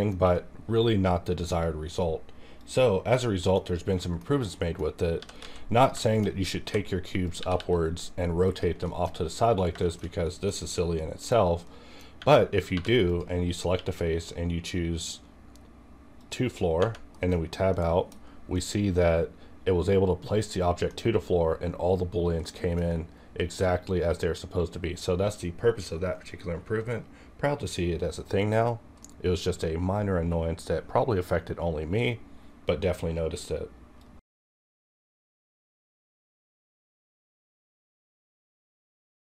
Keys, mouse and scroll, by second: 0.6-2.5 scroll down 1, 2.6 click, 3.1 middle click, 3.2 middle click, 3.6 scroll down 1, 3.9 middle click, 4.3-5.1 scroll down 2, 4.6 middle click, 5.1 g, 5.4 z, 5.7 click, 6.0 shift+middle click, 6.6 g, 7.2 click, 7.4 r, 7.5 r, 8.4 click, 8.9 shift+middle click, 9.1-9.6 scroll up 1, 9.6 scroll down 1, 9.8 shift+middle click, 10.3 middle click, 12.1 Tab, 12.7 3, 13.0 click, 13.1 click, 13.7 q, 16.2 click, 16.8 Right, 17.1 KP_Decimal, 17.8 KP_1, 18.1-18.5 scroll up 1, 18.5-29.0 middle drag, 29.0-34.1 middle drag.